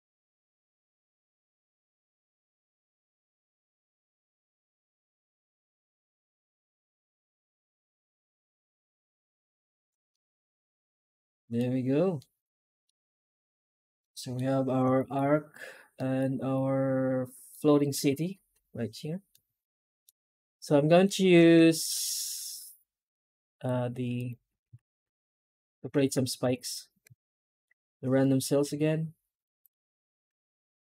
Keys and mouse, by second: 0.0 alt+shift+z, 0.3 middle click, 0.6 a, 1.0 shift+middle drag, 1.3 alt+shift+z, 10.0-11.4 middle drag, 12.0 middle click, 13.9 middle click, 14.8 shift+middle click, 15.8 middle click, 16.4 middle click, 19.2 middle click, 19.8 middle click, 20.2 Tab, 20.9 middle drag, 21.8 shift+middle drag, 22.5-23.5 middle drag, 24.0 right click, 24.3 Tab, 24.9 alt+shift+z, 25.0 a, 25.4 Tab, 27.3 shift+middle drag.